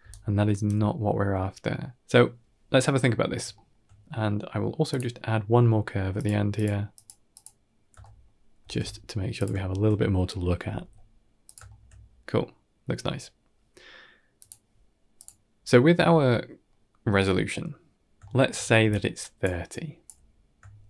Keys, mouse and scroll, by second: 0.0 right click, 0.6 d, 3.4 shift+middle click, 4.8-6.1 drag, 6.4 click, 6.8 click, 7.2 click, 7.9 shift+middle drag, 8.5 shift+d, 9.5 shift+middle drag, 9.7 middle click, 10.5 r, 11.5 shift+middle click, 11.7-12.8 middle drag, 14.2 click, 15.0 click, 16.5-17.2 middle drag, 18.1 shift+middle click, 18.7 d, 18.8 click, 19.4 d, 19.5 click, 19.5 d, 19.9 d, 20.7 shift+middle drag.